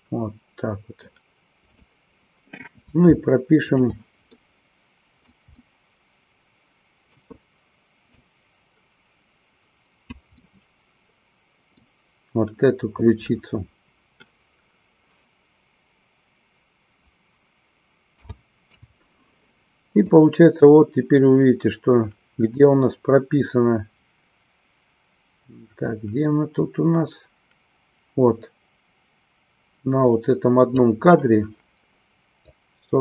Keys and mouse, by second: 1.7 click, 3.6-5.0 shift+drag, 5.1 middle click, 5.7-7.2 middle drag, 8.1-10.2 drag, 10.5-11.9 middle drag, 20.1-31.0 drag, 32.6-33.0 drag.